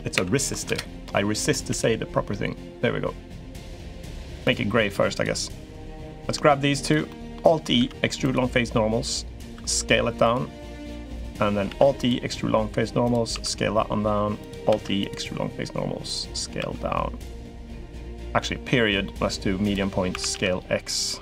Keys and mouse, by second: 1.5 g, 5.6 middle click, 6.6 shift+click, 6.8 click, 7.5 alt+e, 9.3 s, 11.4 alt+e, 13.1 s, 14.5 alt+e, 17.5 s, 18.1 ., 19.9 s.